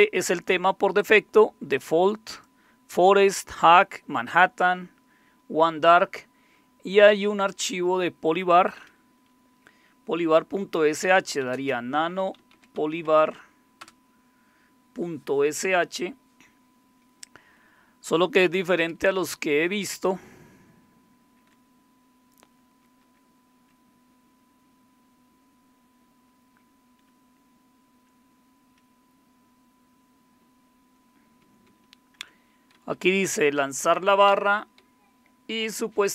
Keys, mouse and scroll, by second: 1.0 click, 1.7 click, 7.5 click, 10.8-13.2 typing, 13.8 Return, 18.2 Down, 18.4 Down, 18.6 Down, 18.8 Down, 18.9-21.5 Down, 22.6 Down, 23.0 Down, 27.1-28.1 Up, 30.4 Right, 31.4 Right, 31.7 Right, 32.2 Up, 32.7 Left, 32.9 Left, 33.1 Left, 33.6 Right, 33.8 Right, 34.3 Down, 34.8 Right, 35.4 Right, 35.6-36.1 Right.